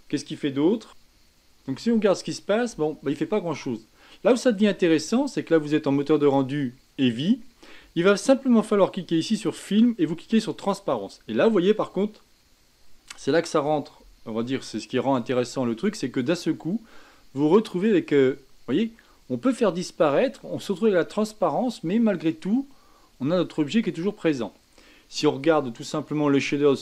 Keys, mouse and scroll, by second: 1.6 g, 6.2 click, 9.3-9.7 drag, 10.6 click, 16.0 g.